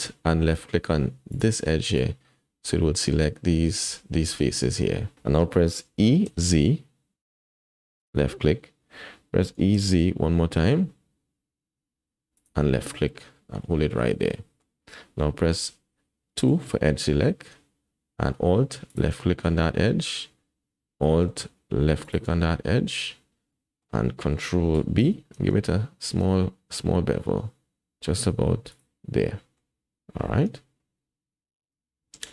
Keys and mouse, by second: 1.3 alt+click, 2.7 click, 5.9 e, 9.5 e, 13.6 click, 14.3 middle click, 16.5 2, 19.2 middle click, 19.8-21.0 drag, 22.0 alt+shift+click, 23.6 middle click, 23.6 click, 23.8 middle click, 25.0 ctrl+b, 29.3 middle click, 30.5 Tab, 31.8 Tab.